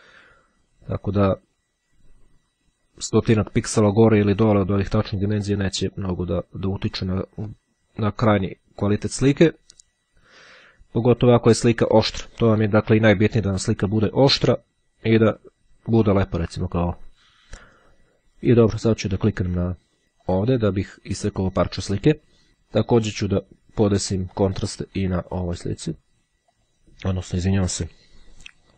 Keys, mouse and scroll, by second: 6.1-8.8 drag, 20.4 click, 24.2-26.4 drag, 26.6 click.